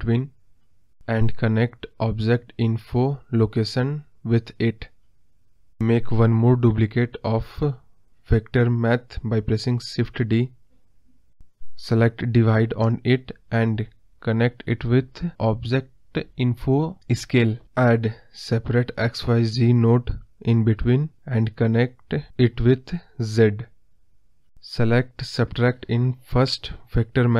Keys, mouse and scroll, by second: 6.3-7.6 drag, 7.6 shift+d, 11.3 click, 15.4-19.8 drag, 23.8-25.0 drag, 25.0 ctrl+z, 26.8-27.3 drag.